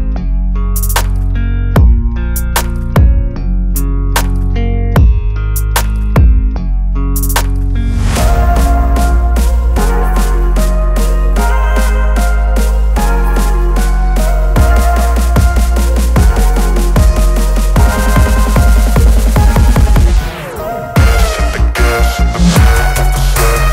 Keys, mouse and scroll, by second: 2.2 v, 2.5 ctrl+t, 4.6-7.0 alt+drag.